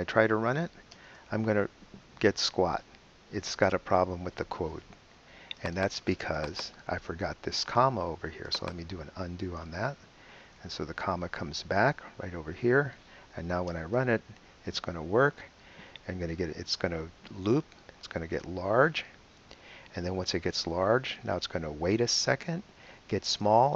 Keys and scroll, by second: 0.5 super+BackSpace, 0.9 super+Return, 10.2 super+z, 13.7 super+Return.